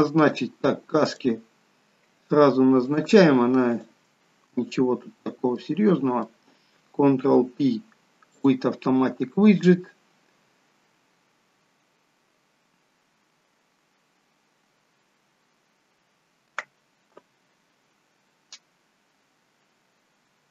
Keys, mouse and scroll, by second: 0.5-1.3 scroll up 3, 1.3 click, 3.1 click, 4.8 click, 4.9 shift+click, 5.9 middle click, 7.4 ctrl+p.